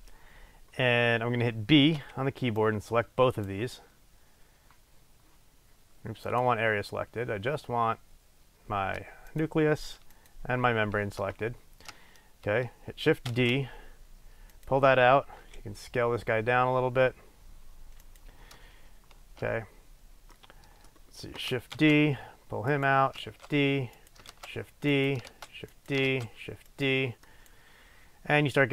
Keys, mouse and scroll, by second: 0.4 scroll down 1, 2.0 b, 5.0-6.3 middle drag, 6.3 click, 9.4 click, 10.2 shift+click, 13.4 shift+d, 14.8 click, 15.5 s, 18.3 click, 20.5-21.9 middle drag, 21.9 shift+d, 22.9 click, 23.3 shift+d, 24.3 click, 24.4 shift+d, 25.0 click, 25.4 shift+d, 26.0 click, 26.2 shift+d, 26.9 click, 27.3 middle click, 27.5 click.